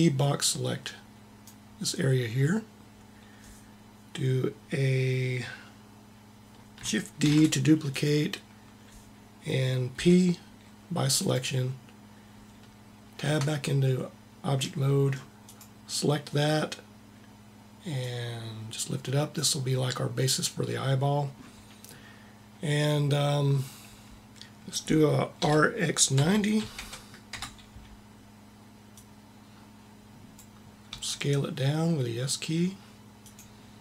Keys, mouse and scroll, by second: 0.8 middle click, 7.1 shift+d, 9.8 p, 13.1 Tab, 17.8-19.1 drag, 25.2 r, 28.7-30.0 drag, 30.7 s.